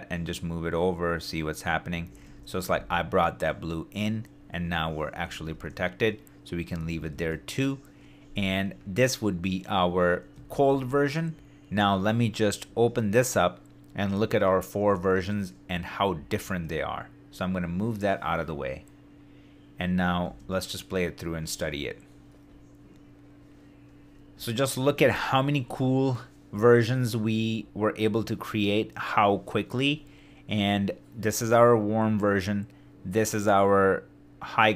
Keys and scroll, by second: 2.0 super+d, 5.3 super+d, 6.9 shift+d, 10.4 shift+d.